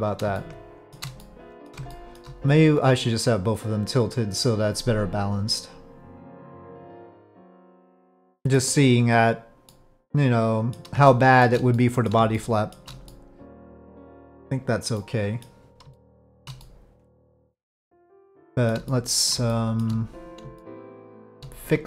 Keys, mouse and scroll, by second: 0.3-0.9 shift+middle drag, 1.2-1.7 middle drag, 1.9-2.2 shift+middle drag, 5.1 click, 6.5 click, 7.0-8.5 middle drag, 9.7-10.7 middle drag, 11.1-11.4 shift+middle drag, 11.7-12.1 middle drag, 12.3-12.7 shift+middle drag, 13.1-13.6 middle drag, 14.9-15.4 middle drag, 15.9-16.4 shift+middle drag, 16.6-18.1 middle drag, 18.2-18.7 shift+middle drag, 18.8-19.3 middle drag, 19.5-19.8 shift+middle drag, 20.5-21.3 shift+middle drag, 21.7 click.